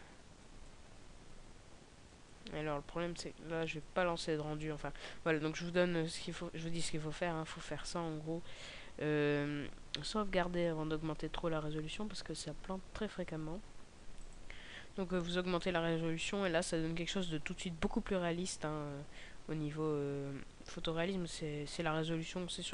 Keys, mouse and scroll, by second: 8.3 right click.